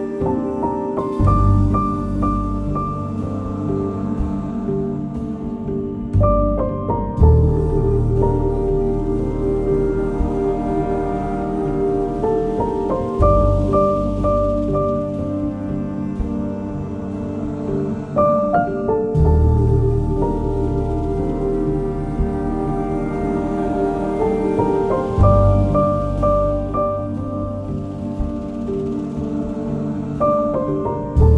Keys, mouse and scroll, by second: 3.0 shift+Return, 3.3 Up, 4.0 ctrl+v, 4.3 ctrl+s, 5.6-10.9 drag, 17.4 click, 22.8 click, 22.9 alt+Tab, 23.1 alt+Tab, 24.4 click, 29.3 alt+Tab, 30.3-31.3 drag.